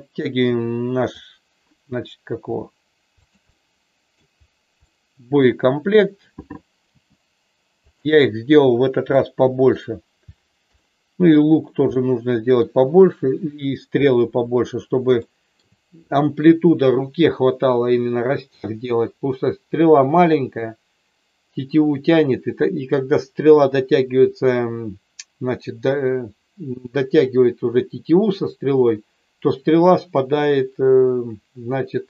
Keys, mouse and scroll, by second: 2.5 r, 3.3 click, 3.5 middle click, 4.9 middle click, 6.9 g, 7.9 click, 9.1 middle click, 10.7 middle click, 11.9 middle click, 15.3 shift+middle click.